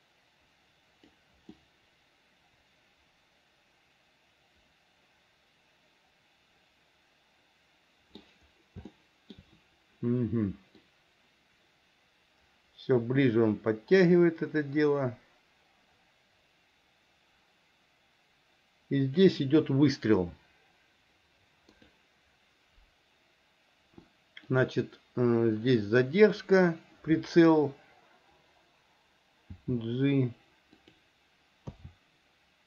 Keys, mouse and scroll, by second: 1.7-8.4 middle drag, 9.1 shift+middle click, 11.1-19.5 drag, 22.0 click, 24.7 click, 25.9 click, 29.7 g, 31.9 a.